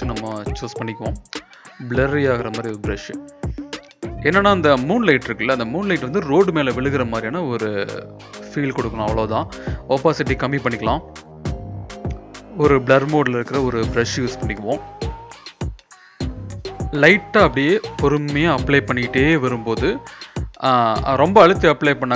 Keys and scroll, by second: 0.0-1.2 typing, 3.4 ctrl+=, 3.7 ctrl+=, 10.7-11.8 typing, 15.0 ], 15.1 ], 15.3 ], 16.9 ], 17.2 ], 17.4 ], 17.6 ].